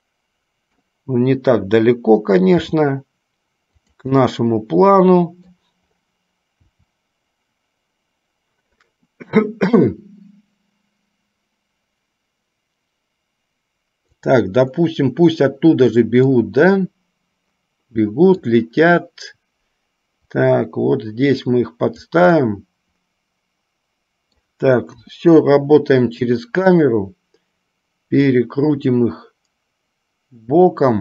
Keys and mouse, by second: 4.4-5.8 middle drag, 16.5-18.8 middle drag, 20.4-22.4 drag, 22.7-24.7 middle drag, 25.3 KP_0, 28.8-31.0 drag.